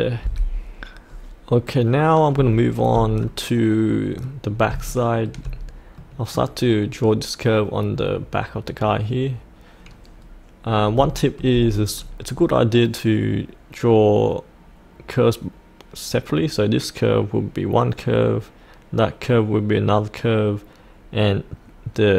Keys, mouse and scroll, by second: 0.2 F8, 1.0-2.3 scroll down 1, 2.5 shift+middle click, 3.1 scroll down 1, 3.3 middle click, 4.5 scroll up 1, 4.8 shift+middle click, 6.0 middle click, 10.2-10.7 scroll down 1, 11.1 shift+middle click, 11.7 click.